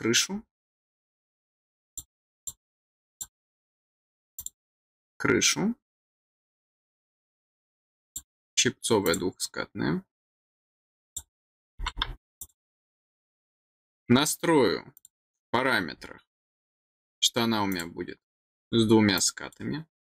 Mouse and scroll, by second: 1.8 click, 2.3 click, 3.0 click, 4.3 click, 7.2 click, 8.0 click, 9.0 click, 11.0 click, 12.3 click, 14.9 click, 17.6 click, 18.5 click, 19.1 click.